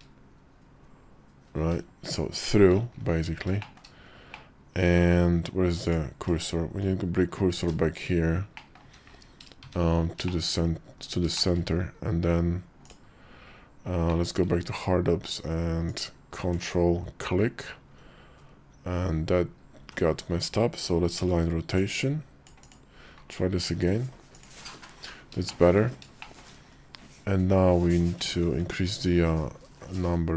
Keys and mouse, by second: 3.4 shift+middle click, 4.1 middle click, 5.6 click, 6.6 shift+s, 8.3 click, 8.6 `, 9.4 `, 10.0 shift+click, 10.7 KP_5, 11.1 shift+click, 13.8 alt+w, 15.6 ctrl+click, 19.6 ctrl+z, 20.9 ctrl+a, 24.1 ctrl+click, 25.2 shift+middle click, 26.0 shift+middle click, 28.1 ctrl+`.